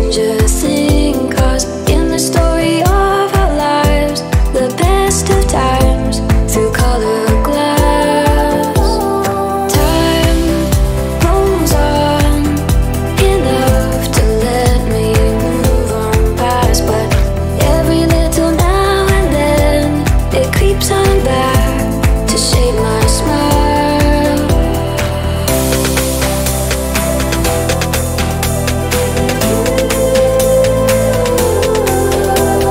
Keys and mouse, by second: 1.0 0, 4.5-7.2 drag, 7.2 Left, 7.3 Left, 8.5 BackSpace, 8.7 BackSpace, 10.2-13.3 drag, 16.7 click, 17.6 click, 18.0-21.0 drag, 22.8-23.4 drag, 23.4-26.4 middle drag, 26.9-31.2 middle drag, 31.2-32.7 drag.